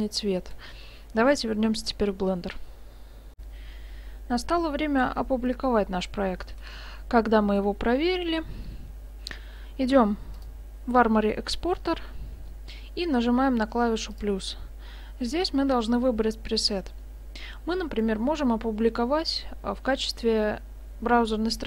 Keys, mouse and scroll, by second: 3.4 F9, 8.7-10.4 scroll down 4, 10.4 click, 11.2-11.5 scroll down 1, 11.7-12.2 scroll down 5, 14.1 click, 18.5-21.5 scroll down 1.